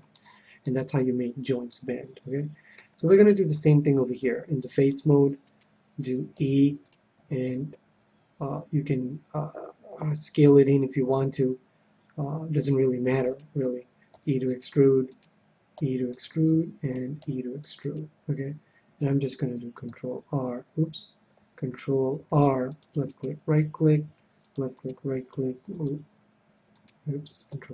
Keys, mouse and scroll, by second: 0.1-2.2 middle drag, 3.0 KP_7, 4.7-6.4 drag, 5.4-6.4 right drag, 6.4 e, 6.7-8.7 right drag, 13.2-19.7 right drag, 14.1 e, 15.2 e, 15.7 e, 17.2 e, 19.9 ctrl+e, 22.1 ctrl+r, 23.2-26.7 right drag, 24.1 ctrl+r, 25.3 ctrl+r, 26.9-27.7 right drag, 27.4 ctrl+z.